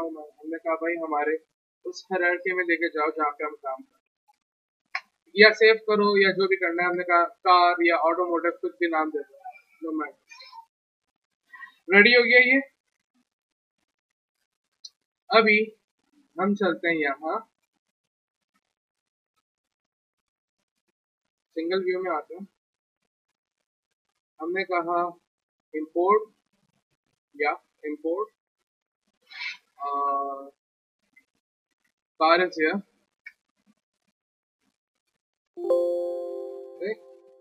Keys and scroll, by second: 2.8 alt+d, 3.2 ctrl+c, 3.5 alt+Tab, 4.3 ctrl+v, 4.9 Return, 6.4-7.4 typing, 30.1 alt+Tab, 30.7 alt+Tab, 31.7 alt+d, 32.0 ctrl+c, 32.3 alt+Tab, 32.7 ctrl+v, 33.2 Return, 34.6-35.7 typing.